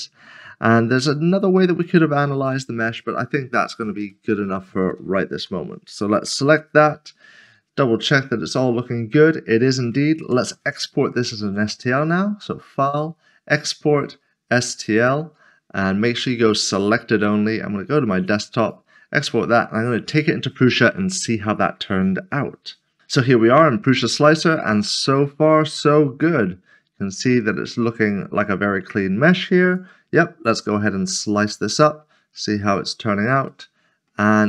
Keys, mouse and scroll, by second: 1.8 shift+middle click, 3.4 scroll down 1, 4.1 shift+middle click, 5.4-7.0 typing, 7.3 middle click, 7.6-9.3 scroll down 1, 9.3 scroll down 1, 12.0 Tab, 12.5 click, 15.0 click, 18.6 click, 23.3 double click, 25.1 scroll up 1, 26.4 click, 31.6 click, 32.4 scroll up 1, 33.7 middle click.